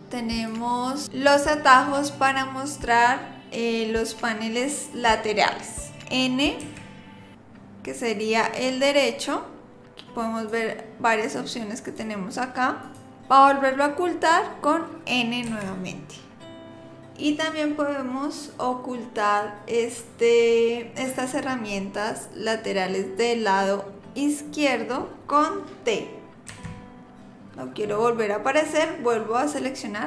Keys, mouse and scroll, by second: 0.3 click, 6.6 n, 8.0 click, 10.4 click, 11.8 click, 12.8 click, 15.5 n, 26.5 t.